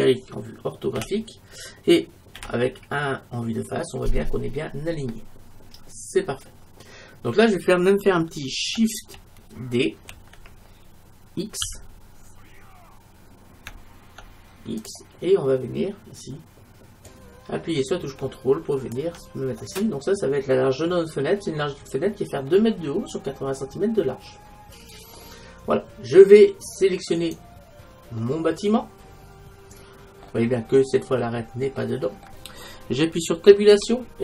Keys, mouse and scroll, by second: 1.0 KP_5, 2.4 KP_1, 5.7-7.6 middle drag, 10.1 shift+d, 17.1-19.0 drag, 19.7-21.6 middle drag, 23.7-25.0 middle drag, 27.3-28.3 right drag, 28.3 middle click, 29.7 middle click, 31.9-33.7 middle drag, 33.8 Tab.